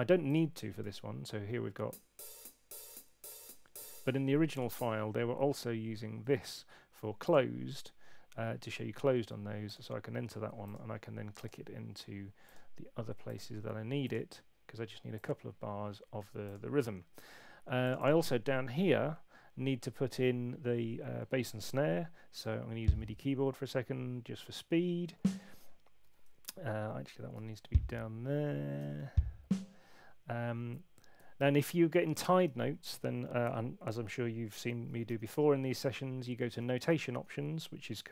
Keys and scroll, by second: 0.8 p, 3.7 space, 22.4 6, 26.4 Left, 31.1 Escape, 35.0 shift+super+n.